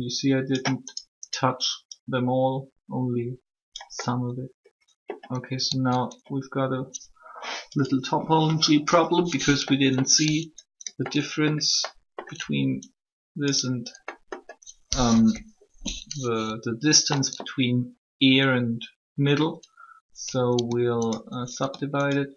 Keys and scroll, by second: 14.9 1.